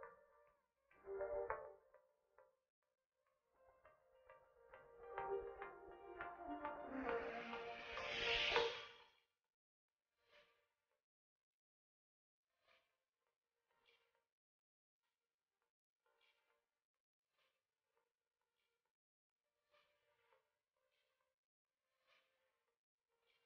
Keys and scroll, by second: 6.6 ctrl+z, 10.2 shift+space, 13.3 shift+Left, 15.4 shift+Right, 21.2 shift+Left.